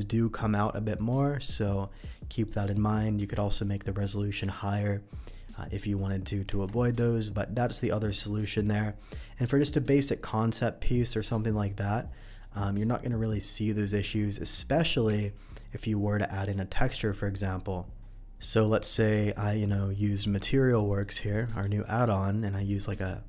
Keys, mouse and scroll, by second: 1.9 middle drag, 2.4 click, 3.4 Tab, 3.6 middle click, 6.5 Tab, 6.8-7.2 middle drag, 7.7-8.5 middle drag, 8.8 middle drag, 9.5 middle click, 10.1-11.6 scroll up 1, 11.6 middle click, 12.4 middle click, 13.5 middle drag, 15.1 n, 16.3 click, 18.6 middle click, 19.1 z, 20.7 middle click, 21.4 click, 22.9 click.